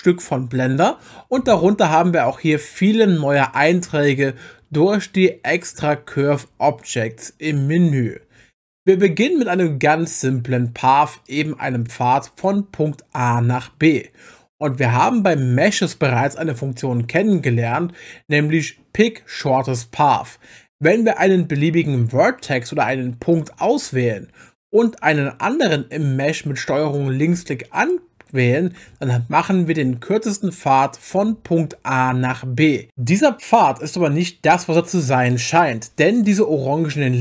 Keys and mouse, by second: 12.4 click, 23.3 click, 27.8 ctrl+click.